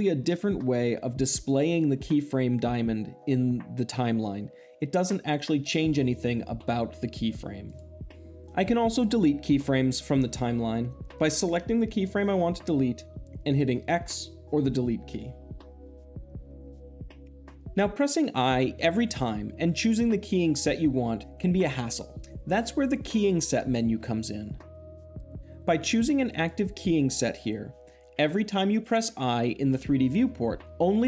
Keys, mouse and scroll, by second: 11.0 click, 15.0 x, 16.9 click, 17.4 ctrl+z, 17.5 i, 25.1 click, 26.1-27.2 drag.